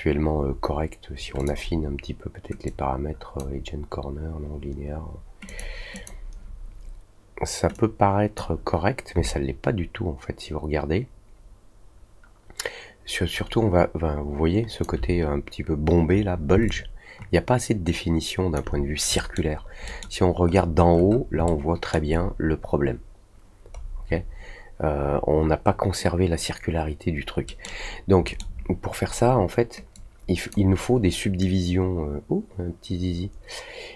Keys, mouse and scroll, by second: 1.3 click, 2.6-5.5 drag, 5.9 click, 7.7-8.3 drag, 9.2-14.8 alt+drag, 16.6-18.5 alt+drag, 19.1 middle click, 19.8 middle click, 20.4-21.2 scroll up 2, 21.4-21.9 alt+middle drag, 23.7-24.2 scroll down 2, 27.4 middle click, 28.2 middle click, 29.9-30.4 drag.